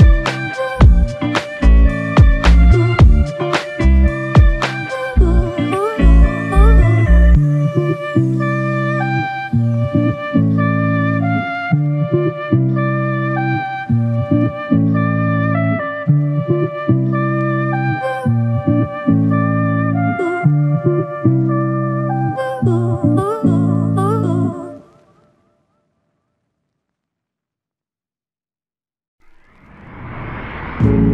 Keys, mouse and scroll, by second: 1.6-2.4 scroll down 1, 2.6 alt+click, 12.5 alt+click.